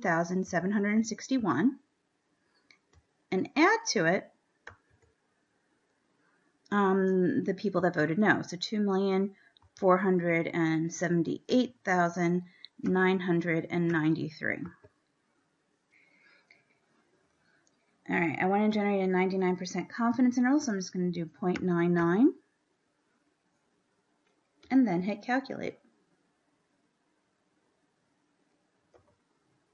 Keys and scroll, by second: 0.0-1.5 typing, 8.1 2, 9.7 4, 11.7 8, 13.1 9, 14.0 9, 14.9 3, 18.7 Down, 20.5 ., 21.7 9, 22.5 9, 24.9 Down, 29.3 Return.